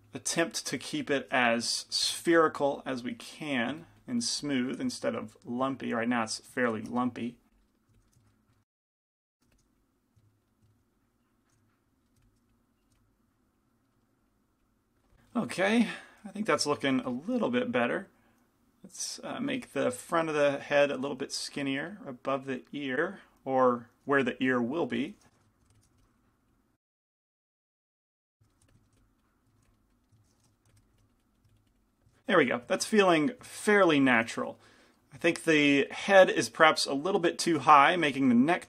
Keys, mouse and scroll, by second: 5.1-7.1 drag, 7.1 f, 7.5-10.5 drag, 8.4-10.0 middle drag, 9.5 g, 9.5 f, 10.2-11.6 middle drag, 11.3 click, 11.6 f, 13.0 f, 13.6-15.4 drag, 13.6 middle click, 13.9 middle click, 17.1 g, 17.1 f, 19.3-22.9 drag, 19.7 f, 21.2 f, 22.9 ctrl+z, 22.9 f, 23.9 click, 24.2 f, 24.7-26.0 middle drag, 25.8 i, 25.8 g, 25.8 f, 26.0 f, 26.8-28.2 drag, 26.9 middle click, 27.2-29.7 typing, 28.2 ctrl+z, 28.2-29.5 middle drag, 28.4 ctrl+z, 29.5 click, 30.7 f, 30.7 i, 31.0 f, 31.2-33.2 drag, 37.8 Tab.